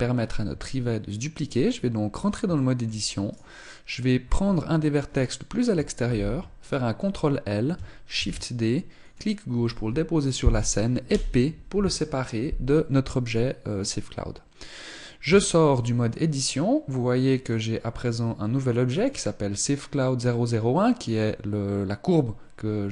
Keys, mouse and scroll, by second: 0.2 Tab, 1.3-2.2 scroll up 1, 2.2 shift+middle click, 2.2 scroll up 3, 2.4 right click, 4.0-4.8 scroll down 4, 5.8 ctrl+l, 7.9 shift+d, 10.8 p, 15.0 Tab, 16.6 middle click, 17.8-18.2 scroll down 3, 18.7 click.